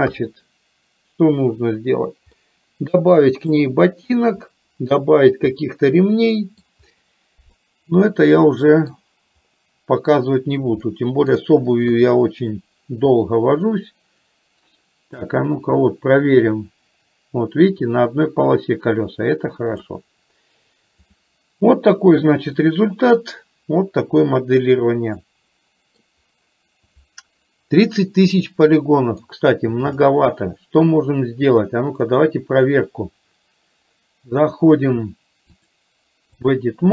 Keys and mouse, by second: 0.1 KP_1, 2.4-3.5 middle drag, 5.6-6.7 middle drag, 7.6-9.0 middle drag, 11.0 shift+middle click, 12.0 KP_3, 15.4-19.9 drag, 22.7-26.1 middle drag, 28.9 middle click, 30.0 click, 35.7-36.7 drag.